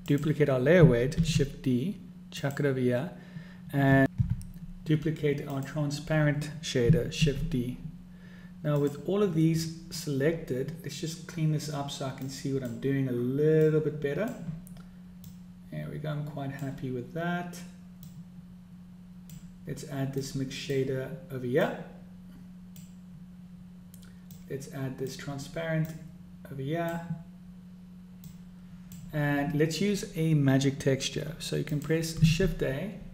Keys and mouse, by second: 0.1 click, 1.5 shift+d, 5.9 click, 7.7 shift+d, 12.7 click, 14.0 click, 15.7-17.2 drag, 18.4-19.8 drag, 20.7-21.2 drag, 22.0-23.6 drag, 24.8 click, 26.2-27.4 drag, 28.7 click, 32.1 click, 32.7 shift+a.